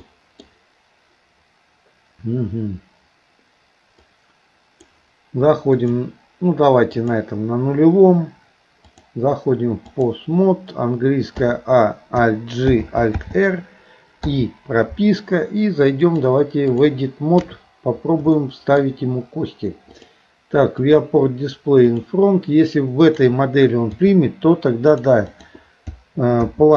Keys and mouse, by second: 0.0 middle click, 4.0 click, 5.8 click, 7.0 click, 9.0-10.2 drag, 16.0 click, 18.4 shift+middle click, 20.0 click, 20.8 click, 22.0-25.7 drag.